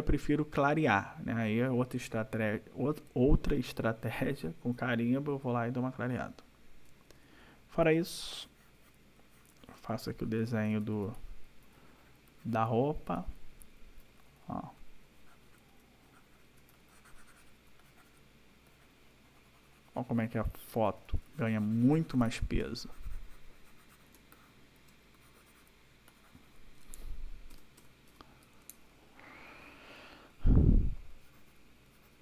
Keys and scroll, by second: 6.8 \, 10.0 ], 13.5 ], 17.4 \, 18.4 ], 20.8 \, 22.4 space, 24.1 space, 27.5 ctrl+-.